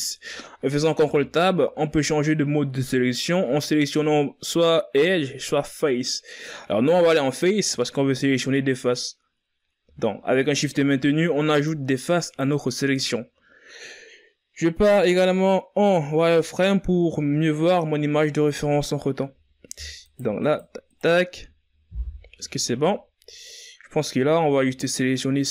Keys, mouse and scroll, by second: 1.2 ctrl+Tab, 11.7 shift+right click, 12.4 shift+right click, 16.4 z, 19.5 z, 20.2 shift+right click, 20.6 shift+right click, 21.0 shift+right click, 21.5 z, 23.0 z.